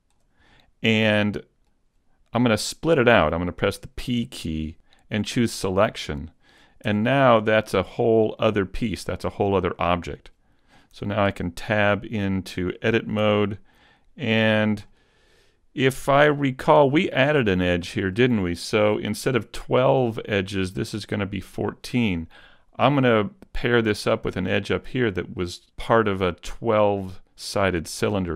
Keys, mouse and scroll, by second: 0.5 middle click, 4.1 p, 6.9 Tab, 7.9 right click, 8.3 middle click, 10.9 Tab, 10.9 middle click, 11.5 middle click, 13.2 z, 13.5-14.1 scroll up 2, 13.9 shift+middle click, 14.5-14.9 scroll down 2, 14.9 middle click, 17.3 middle click, 20.7 shift+middle click, 27.9 shift+middle click.